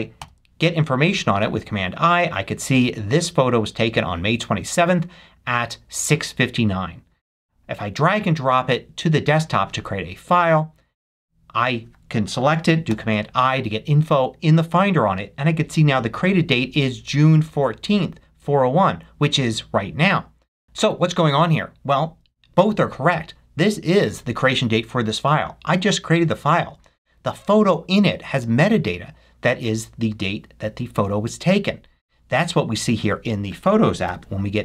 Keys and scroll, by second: 0.2 super+i, 12.9 super+i, 34.0 super+i.